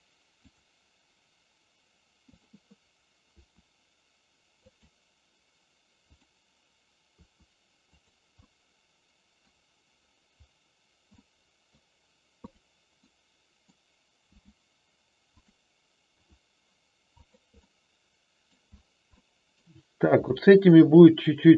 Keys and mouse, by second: 2.3 click, 3.3 r, 4.5 click, 6.1 click, 7.1 r, 8.4-9.4 middle drag, 11.1 middle click, 12.4 click, 13.0 middle click, 14.3 g, 16.1 r, 17.5-18.5 middle drag, 19.1 middle click, 20.3-21.5 middle drag.